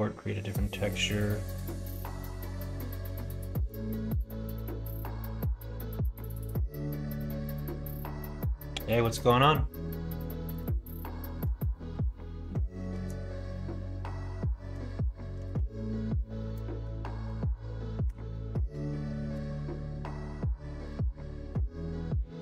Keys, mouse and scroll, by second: 0.6-4.0 drag, 10.5-19.9 drag, 20.8 click.